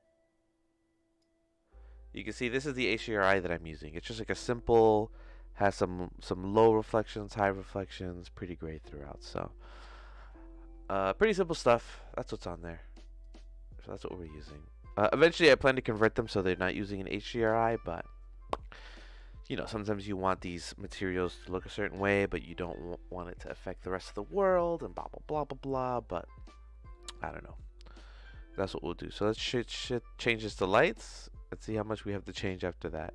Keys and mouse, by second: 1.4-2.4 drag, 13.2 click, 14.4 middle click, 15.6 middle click, 26.9 middle click, 27.7 middle click, 28.6 click, 30.4-33.1 drag.